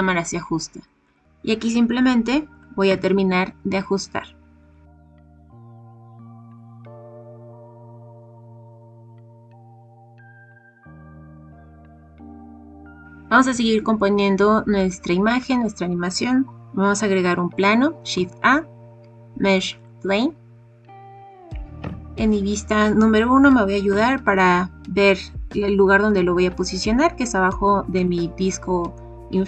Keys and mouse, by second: 2.5 g, 2.8 x, 4.8-5.6 typing, 6.1 click, 6.4 click, 6.7 click, 7.1 g, 7.2 z, 7.4 click, 8.7-10.6 typing, 8.9 ctrl+z, 9.5 right click, 9.5 ctrl+z, 9.8 right click, 10.5 click, 11.0 click, 11.3 click, 18.1 shift+a, 21.7 KP_1, 23.3 g, 23.8 z, 27.9 click.